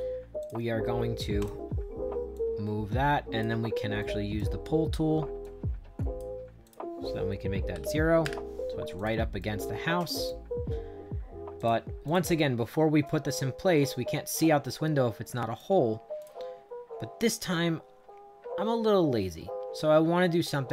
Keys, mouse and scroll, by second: 0.3 click, 1.3 click, 2.2-3.3 drag, 3.9 right click, 5.3 click, 6.5 click, 7.6 0, 8.1 Return, 8.9 click, 9.3 right click, 11.5 click, 12.0 click, 12.3-15.5 right drag, 16.1 click.